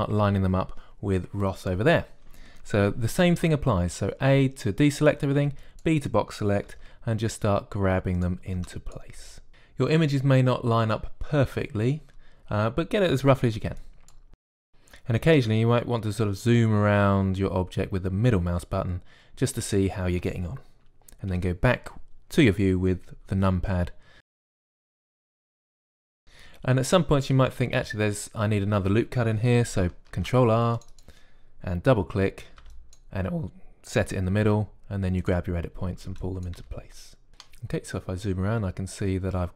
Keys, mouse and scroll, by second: 0.0-4.5 typing, 5.3 click, 5.9-9.4 typing, 6.4 click, 8.1 click, 8.9 click, 9.8 click, 11.3-13.2 typing, 11.6-13.2 drag, 14.1 click, 14.3 a, 15.3 click, 22.2 KP_3, 24.3-25.8 typing, 24.5 click, 25.1 click, 30.9 ctrl+r, 33.3 a, 33.5 b, 35.3 g, 36.8 a, 36.9 b, 37.3 g, 38.5-39.5 typing.